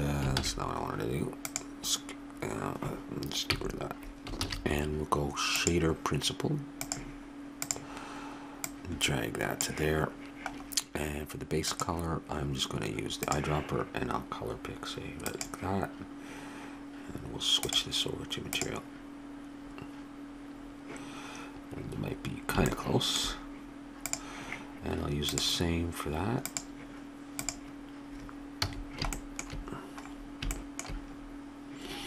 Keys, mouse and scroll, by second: 0.4 ctrl+z, 1.5-3.1 drag, 3.5 x, 4.4 shift+a, 8.6-10.4 drag, 10.7 middle click, 11.6-13.5 drag, 17.6-19.3 drag, 22.7-24.1 middle drag, 24.1-28.7 drag, 28.7 a, 28.8-31.9 middle drag.